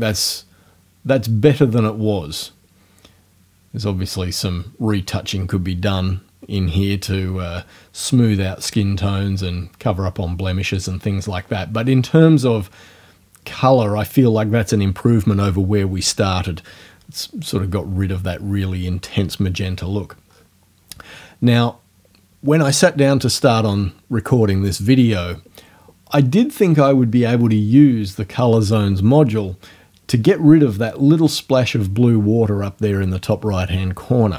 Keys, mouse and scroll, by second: 0.2-0.5 scroll up 1, 11.3-12.1 scroll down 4, 20.3 scroll down 2.